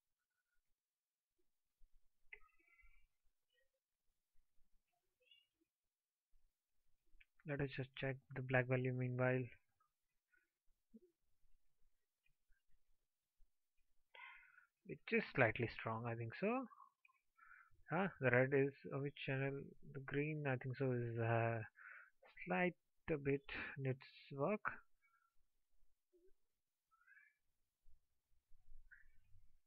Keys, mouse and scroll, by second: 11.6 alt+click.